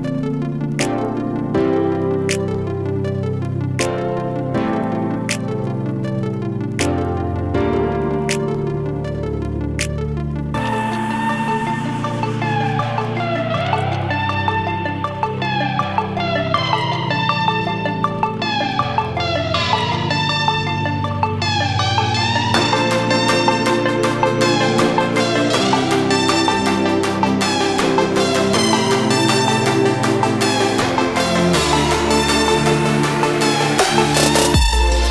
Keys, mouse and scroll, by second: 7.9-11.5 alt+drag, 11.5 ctrl+z, 12.7 click, 13.0-15.4 alt+drag, 15.4 typing, 15.7-18.0 alt+drag, 18.1 typing, 18.3-25.0 alt+drag, 25.8-28.8 alt+drag, 29.0 click, 30.8 click, 32.3 click.